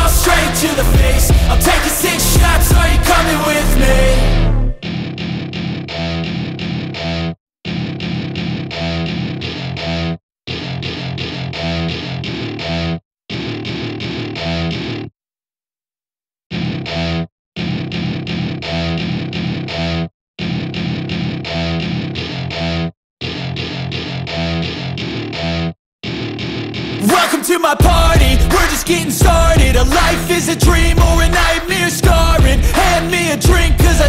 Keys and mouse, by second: 1.9-3.8 drag, 4.3 click, 5.0 drag, 7.1 g, 7.9 x, 9.1 click, 10.0-11.7 drag, 12.1 click, 12.9-14.1 drag, 20.2 ctrl+z, 20.5 ctrl+z, 21.0 ctrl+z, 21.2 ctrl+z, 21.6 ctrl+z, 22.3 ctrl+z, 23.6 ctrl+z, 24.3 ctrl+z, 25.9 ctrl+z, 26.1 ctrl+z, 26.5 ctrl+z, 26.7 ctrl+z, 26.8 ctrl+z, 27.1 ctrl+z, 27.2 ctrl+z, 27.8 ctrl+z.